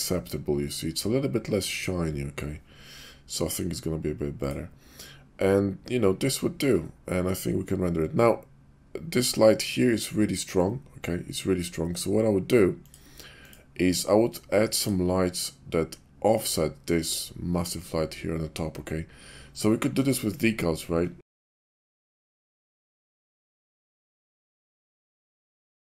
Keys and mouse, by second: 4.3 click, 12.8 click, 19.9 d, 21.8 ctrl+g, 21.9-25.7 typing, 22.7 Return, 23.2 ctrl+z, 23.9 Return, 24.4 click, 24.8 click.